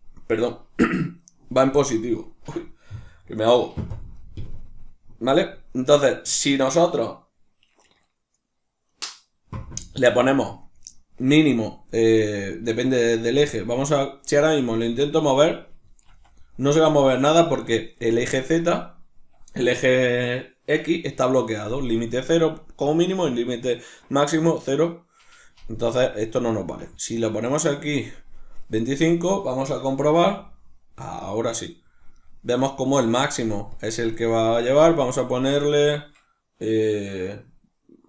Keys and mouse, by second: 15.0 right click, 15.7 r, 17.0 right click, 26.6-28.7 drag, 28.7 right click, 29.8 r, 32.3 right click, 37.3-38.0 drag.